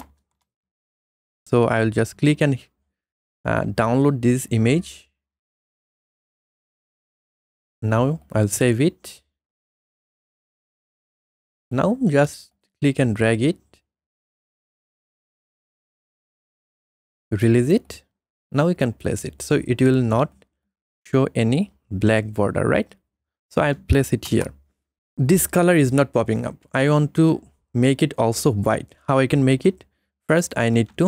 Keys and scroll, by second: 0.0-0.2 typing, 1.4 ctrl+z, 14.6 alt+Tab, 24.3 Return.